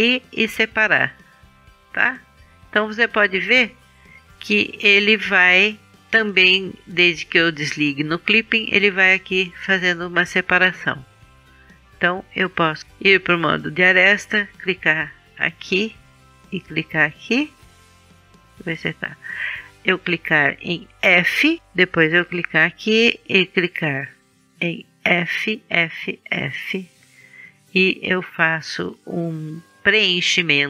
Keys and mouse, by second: 0.7-2.9 middle drag, 12.8 right click, 15.2-17.8 drag, 21.0 f, 21.6 f, 25.0 f, 25.6 f, 27.7 f.